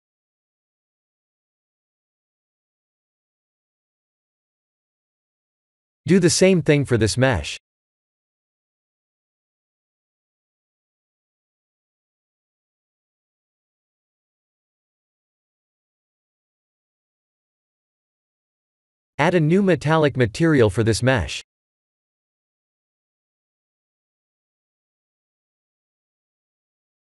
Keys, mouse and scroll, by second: 0.2 middle click, 2.9 scroll down 4, 4.5 shift+middle click, 5.5 click, 7.0 click, 7.7 click, 8.4 click, 9.7 ctrl+shift+t, 15.9 middle click, 18.2 click, 19.9 click, 23.8 click, 25.1 middle click, 27.0 click.